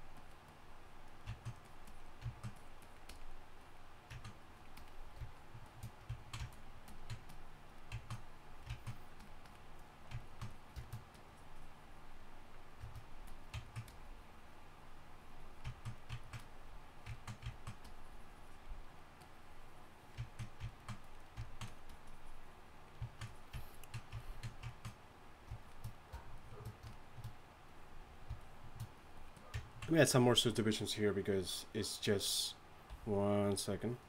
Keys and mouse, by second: 31.2 right click, 32.9 a.